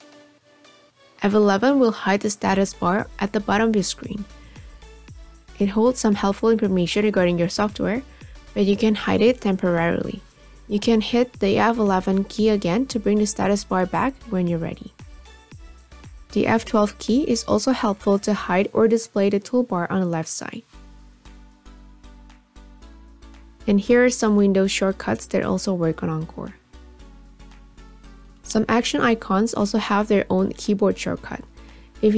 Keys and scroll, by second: 1.3 F11.